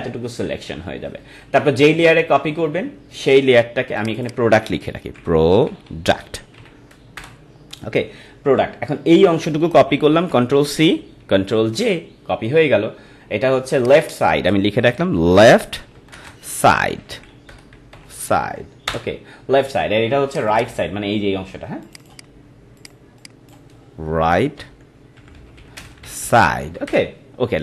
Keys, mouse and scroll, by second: 4.0 click, 4.9-7.1 typing, 7.2 Return, 10.3 ctrl+c, 11.7 ctrl+j, 13.8 click, 14.6-18.8 typing, 18.8 Return, 20.3 click, 24.2-26.9 typing.